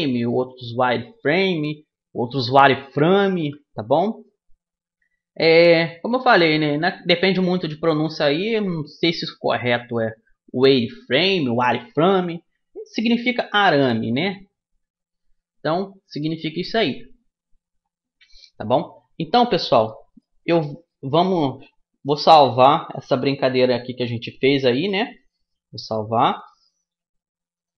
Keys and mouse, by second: 6.5-8.3 drag, 15.0 a, 15.7 middle click, 18.7 middle click, 21.5 middle click, 21.7-23.5 drag, 25.7-27.5 drag.